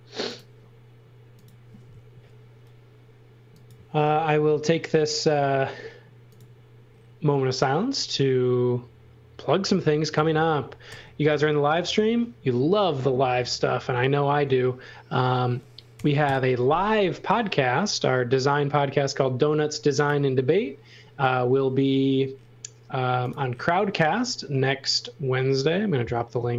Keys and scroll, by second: 2.1 a, 10.0 space, 10.9 a, 16.0 8, 16.3 Return.